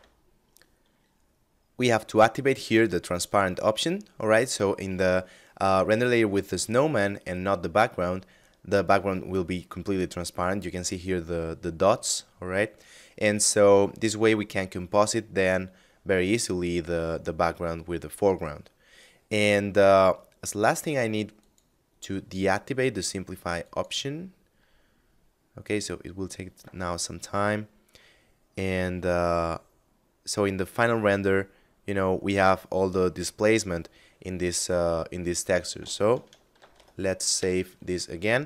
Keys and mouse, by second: 2.7 click, 20.8 click, 21.8 middle click, 23.0 click, 35.9 ctrl+shift+s, 36.7 KP_Add.